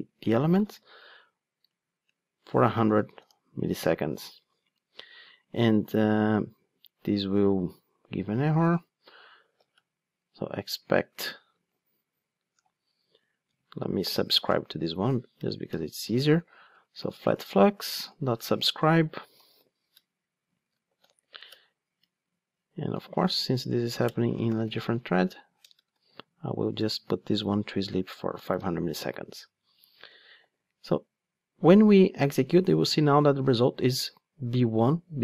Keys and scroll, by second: 0.1 Return, 6.0 Tab, 10.2 Return, 13.5 super+x, 14.0 Tab, 16.7 Return, 27.6 Return, 30.4 ctrl+shift+d.